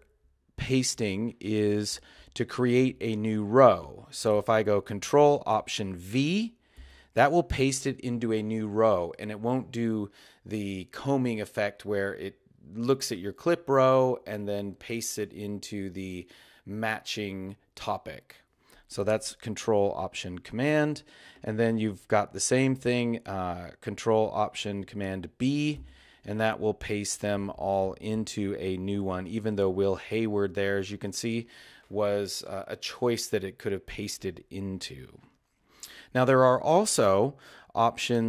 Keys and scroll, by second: 6.8 ctrl+alt+super+v, 25.8 ctrl+alt+super+b.